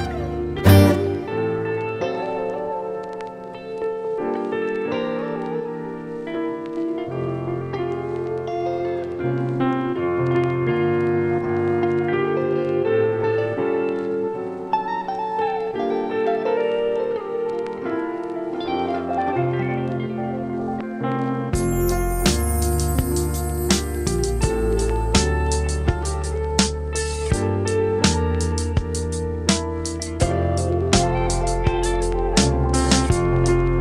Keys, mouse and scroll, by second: 1.1 click, 2.4-3.6 middle drag, 3.6 KP_0, 5.1-8.6 drag, 8.6-11.2 middle drag, 11.2 KP_0, 12.7-17.2 drag, 17.2 ctrl+s, 17.8-18.7 scroll up 3, 18.7 scroll down 4, 19.3-22.7 middle drag, 22.7 KP_0, 27.4-30.1 drag, 30.3 ctrl+s.